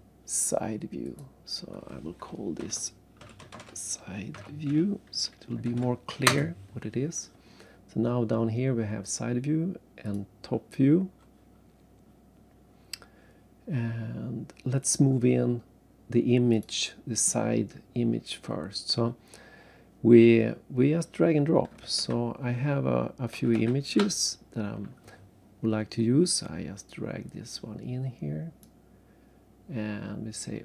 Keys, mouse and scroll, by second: 1.0 click, 2.6-6.0 typing, 6.3 Return, 10.0 click, 10.8 scroll down 3, 12.1-12.7 scroll up 2, 12.7 scroll down 2, 14.1 scroll up 2, 16.5 click, 17.7 scroll down 3, 18.6-19.1 scroll up 2, 20.3-21.0 scroll up 1, 22.0 alt+Tab, 26.9 click.